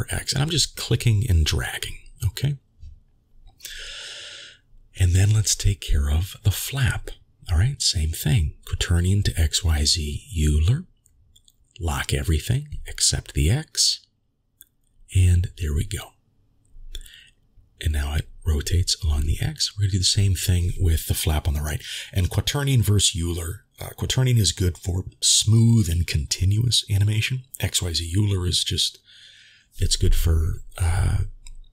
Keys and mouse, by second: 2.7-3.2 shift+middle drag, 6.4 click, 8.5-9.7 drag, 13.4 click, 14.4 click, 17.2-18.3 drag, 18.9 ctrl+z, 22.9-23.8 drag, 25.1 click, 27.9 ctrl+s, 28.8-30.4 middle drag.